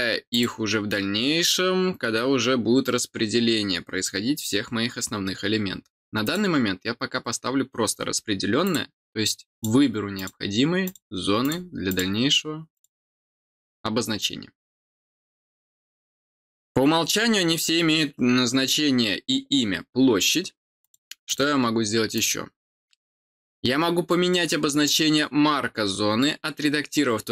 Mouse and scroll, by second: 0.3 click, 6.2 click, 8.6 click, 9.5 click, 10.1 click, 10.8 click, 11.4 click, 11.8 click, 12.7 click, 16.1 middle click, 20.8 click, 21.2 click, 22.1 click, 24.8 click.